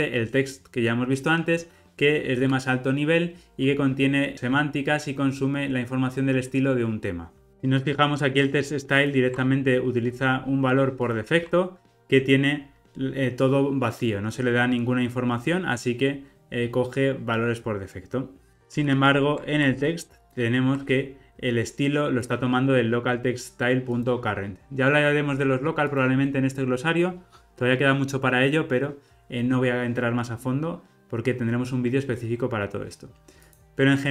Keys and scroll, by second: 7.5 super+b, 18.5 super+z, 20.8 super+b, 30.4 alt+super+[.